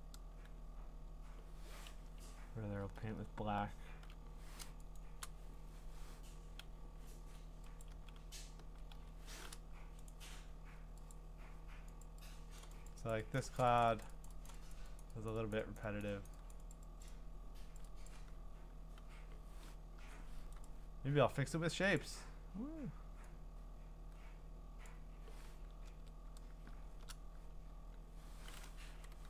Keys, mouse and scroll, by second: 2.0-2.8 ], 3.0-4.1 ], 5.0 click, 6.6-8.6 typing, 7.8 click, 10.1 right click, 11.1 click, 12.0 click, 12.6 click, 12.9 click, 13.1 click, 13.4 click, 13.6 click, 13.8 click, 14.0 click, 14.3 click, 14.5 click, 14.7 click, 15.0 click, 15.3 click, 15.5 click, 15.8 click, 16.0 click, 16.3 click, 16.5 click, 16.7 click, 17.0 click, 17.8 click, 18.1 click, 20.0 u, 20.6 right click, 22.0 click, 24.8 click, 25.9 ctrl+z.